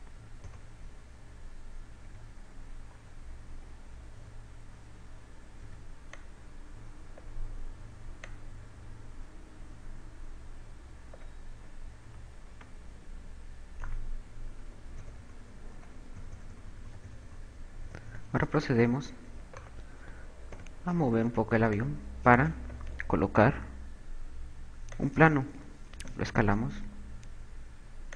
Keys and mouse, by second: 0.5 KP_2, 2.8 b, 6.3 KP_8, 6.3 b, 9.1 click, 12.3 a, 13.1 z, 14.0 Tab, 15.5-16.7 typing, 18.6 KP_4, 18.8 KP_4, 20.4 right click, 21.0 g, 21.7 click, 22.3 click, 26.6 s.